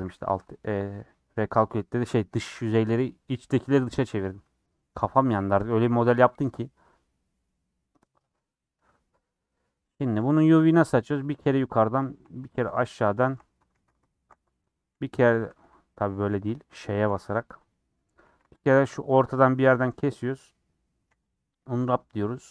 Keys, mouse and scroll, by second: 0.0 /, 0.3 scroll up 1, 0.3-2.9 middle drag, 2.9-3.5 scroll down 1, 9.4 middle click, 9.9 Tab, 11.1 alt+click, 11.4-13.2 middle drag, 13.2 alt+shift+click, 13.7 ctrl+z, 14.3 alt+shift+click, 14.7-16.3 middle drag, 16.3 ctrl+z, 17.1 ;, 17.7 middle click, 18.9 middle click, 20.0 a, 21.4 u.